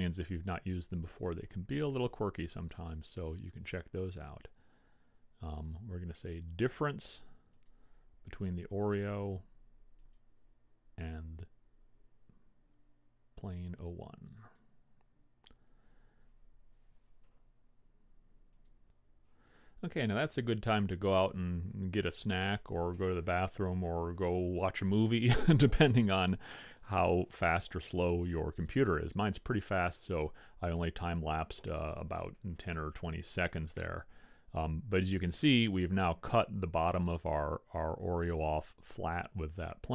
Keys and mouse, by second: 5.6-7.5 drag, 10.2-11.9 drag.